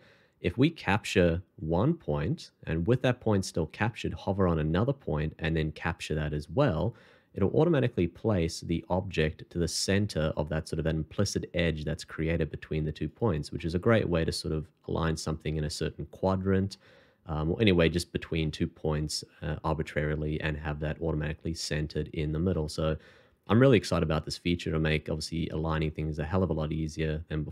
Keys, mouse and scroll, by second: 1.6 c, 6.3 c, 7.0 middle click, 13.6 middle click, 16.7 middle click.